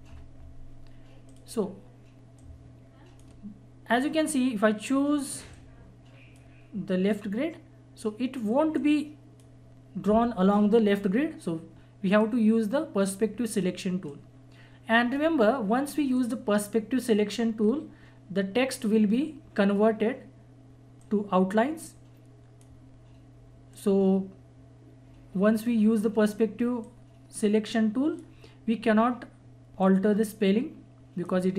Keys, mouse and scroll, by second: 1.3-11.8 drag, 12.1 right click, 13.0-21.0 drag, 21.0-31.5 drag.